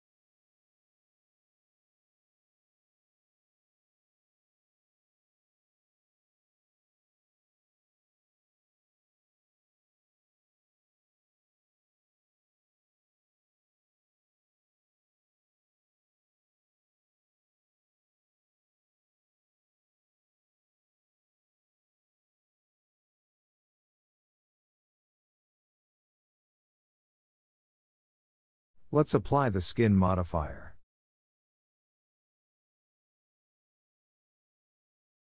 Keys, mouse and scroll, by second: 1.2-1.5 scroll up 1, 1.5 Tab, 1.8-2.2 scroll up 1, 2.2-5.0 middle drag, 5.0 click, 6.2-6.8 drag, 7.0 scroll down 2, 7.2-9.5 middle drag, 9.5 scroll up 1, 9.8 click, 10.0 Tab, 10.8 click, 11.2-12.4 scroll down 2, 12.4 ctrl+a, 13.7 g, 16.1 click, 16.5 ctrl+a, 21.5 middle click, 22.1 Tab, 22.3 click, 22.5 scroll down 2, 22.7-24.5 middle drag, 24.5-25.2 shift+scroll up 1, 25.2-26.6 scroll up 1, 26.6-28.9 middle drag, 28.9-31.9 drag, 31.9-32.3 shift+middle drag, 32.3 click, 32.7 right click, 33.5-33.8 middle drag, 33.8 click, 34.3 alt+z, 34.6-35.2 middle drag.